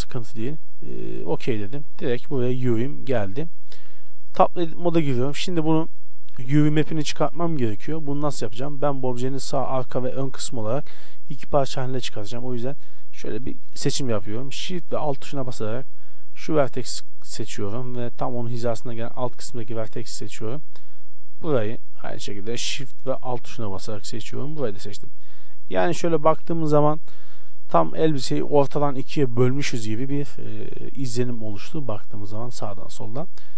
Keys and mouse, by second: 2.3-4.1 middle drag, 4.1 Tab, 5.6 shift+space, 16.2 right click, 17.1-20.6 drag, 20.6 middle click, 21.4-23.0 middle drag, 24.0 right click, 25.2 z, 26.3 KP_7, 31.2-32.8 middle drag.